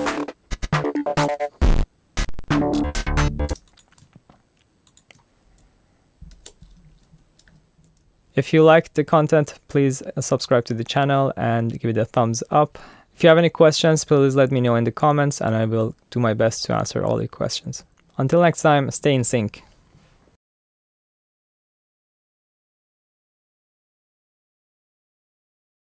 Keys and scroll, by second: 3.5 space, 4.0 shift+space, 6.3 alt+super+u, 7.5 alt+super+u.